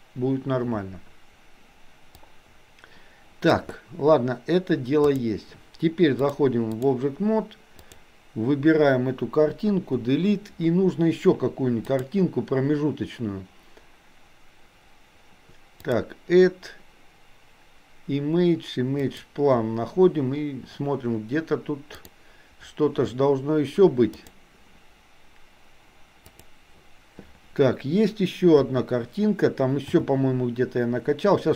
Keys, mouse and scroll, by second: 2.2-3.6 drag, 5.0 click, 6.2-7.1 drag, 7.9 click, 9.9 Delete, 12.0-15.4 drag, 15.9-19.6 drag, 28.6 KP_1, 30.0 r.